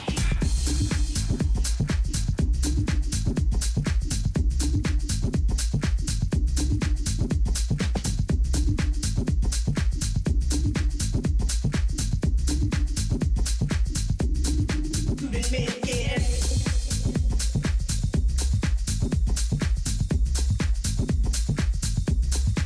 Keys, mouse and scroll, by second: 2.4 z, 2.8 z, 3.1 z, 3.8-6.3 middle drag, 7.6 KP_2, 9.7 middle click, 12.1 a, 12.4 a, 16.9-18.6 middle drag, 18.7-21.9 middle drag.